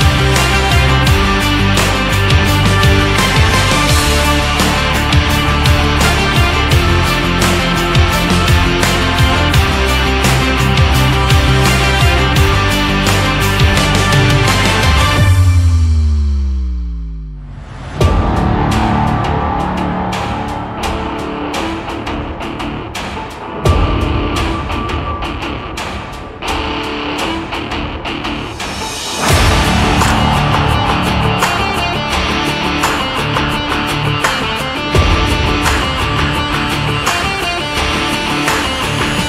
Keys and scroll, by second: 10.2 ctrl+z, 27.9 shift+x.